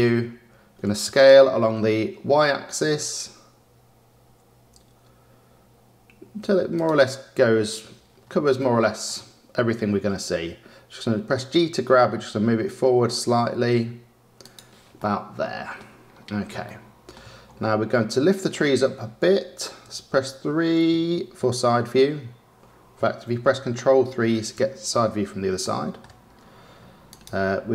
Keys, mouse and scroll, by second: 0.0 scroll, 0.7-1.0 scroll down 2, 1.0 s, 8.0-8.5 scroll, 8.5-11.4 shift+middle drag, 11.4 g, 14.9-16.1 middle drag, 16.6-17.4 shift+middle drag, 17.9-20.1 middle drag, 20.1 KP_3, 23.5 ctrl+KP_3, 25.5-26.3 shift+middle drag, 26.3 scroll, 27.0 click.